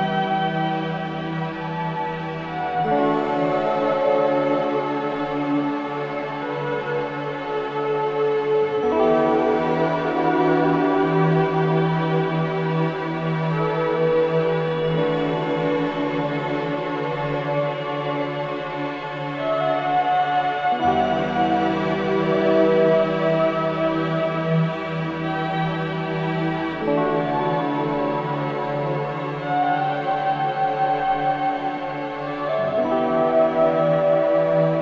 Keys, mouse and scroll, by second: 2.0 e, 3.8 click, 5.8 click, 8.9-9.8 scroll up 1, 9.8 click, 13.3-13.9 drag, 14.7 click, 16.5-18.0 middle drag, 18.7-19.4 drag, 20.5-23.2 drag, 23.3-24.1 drag, 28.3 ctrl+b, 31.7 click, 32.3 middle click, 32.7 scroll down 2, 33.1-34.7 middle drag, 34.7-34.8 scroll up 2.